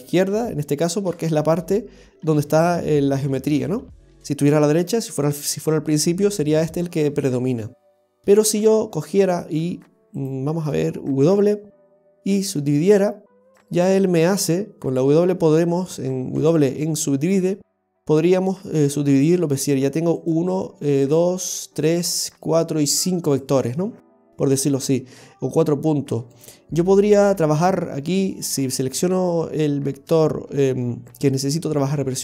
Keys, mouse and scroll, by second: 7.8-8.2 scroll down 1, 8.3 shift+middle click, 9.3 right click, 10.2 shift+right click, 11.3 w, 16.4 w, 20.2 right click, 21.1 right click, 22.4 right click, 23.2 right click, 26.4 right click, 28.6 right click.